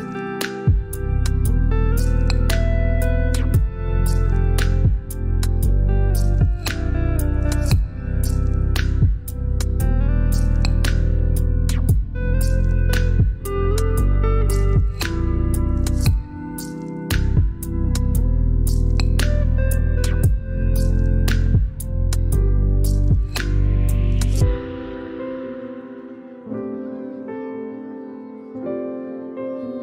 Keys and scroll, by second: 1.0 typing, 4.0 typing, 4.8 ctrl+BackSpace, 15.0 ctrl+g, 18.1-21.1 typing, 22.6 ctrl+a, 23.0-26.2 typing, 27.5 BackSpace, 28.9 typing.